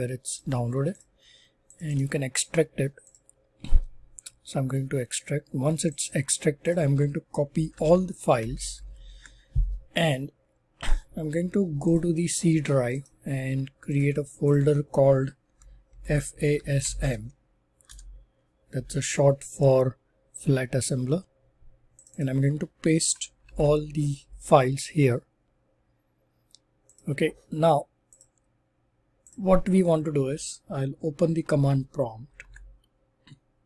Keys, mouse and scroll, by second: 0.3 click, 0.9 click, 1.9 click, 1.9 right click, 3.0 click, 5.9 click, 6.1 click, 6.6 click, 7.6 ctrl+a, 8.3 ctrl+c, 8.6 ctrl+c, 8.8 ctrl+c, 11.9 click, 13.0 right click, 13.9 click, 14.4 click, 15.6-17.2 typing, 17.8 Return, 22.0 click, 22.2 click, 23.4 ctrl+v, 26.9 click, 28.2 click, 29.2 click, 32.4 super+r, 33.4-33.6 typing.